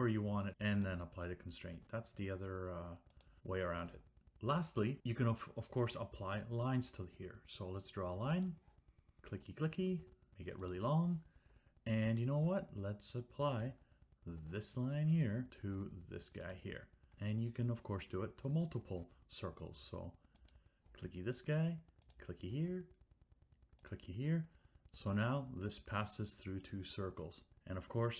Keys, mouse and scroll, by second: 0.2 click, 1.0 click, 3.3 click, 4.0 click, 8.6-9.2 scroll, 9.2-9.9 scroll, 10.8-11.6 scroll, 13.7-14.5 scroll, 14.5 click, 15.3-15.7 scroll, 16.6 scroll, 16.7 click, 20.6 click, 24.0 click, 24.8 click, 27.5 Escape.